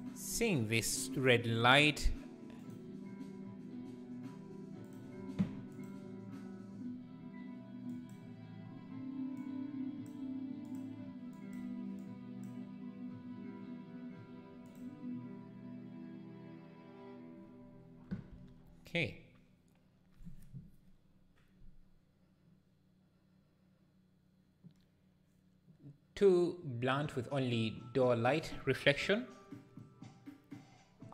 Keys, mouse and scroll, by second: 0.0 click, 5.7 click.